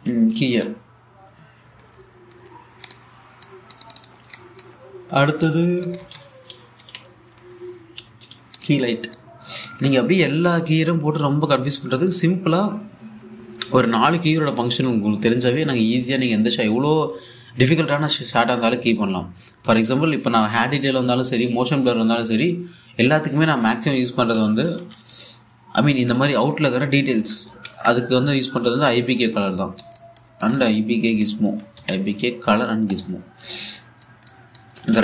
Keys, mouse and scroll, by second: 1.0 k, 2.3-2.6 typing, 3.5 click, 6.6 Tab, 7.4-9.0 typing, 9.2-11.3 drag, 24.9 click, 25.3 Tab, 25.9 i, 27.8-28.1 typing, 29.2 click, 31.2 Tab, 31.5-32.9 typing, 33.6 click.